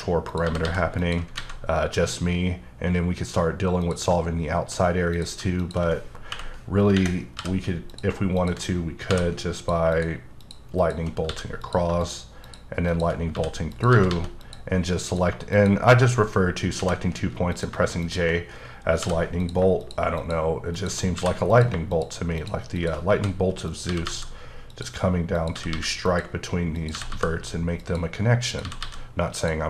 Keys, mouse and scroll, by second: 0.3 click, 0.6 g, 1.0 click, 1.3 alt+a, 3.8 click, 5.1 click, 6.3 k, 7.4 j, 7.9 click, 8.3 click, 9.1 j, 9.6 click, 9.9 shift+click, 10.4 shift+double click, 10.8 shift+click, 11.3 f, 11.6 click, 12.4 shift+double click, 12.9 shift+click, 13.3 f, 13.7 click, 13.9 g, 14.1 g, 14.4 click, 15.0 click, 15.5 click, 16.7 j, 17.5 click, 19.0 j, 19.4 click, 20.2 double click, 20.7 shift+click, 21.1 f, 21.5 click, 22.4 shift+double click, 22.7 shift+click, 23.1 f, 23.7 click, 23.8 g, 24.0 g, 24.7 click, 25.3 click, 25.5 g, 25.7 g, 26.1 click, 26.7 click, 26.9 g, 27.1 g, 27.8 click, 28.5 click, 28.6 g, 28.8 g, 29.3 click.